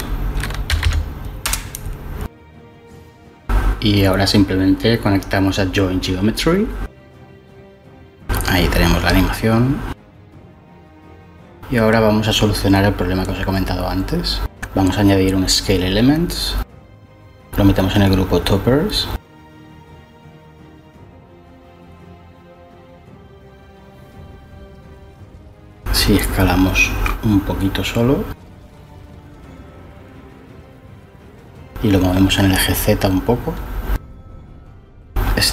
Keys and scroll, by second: 0.0-0.8 typing, 1.4 Return, 14.5-15.6 typing, 27.6-28.4 typing, 31.3-32.7 typing, 33.3 Left, 33.7 0, 33.9 Return, 34.0 Return.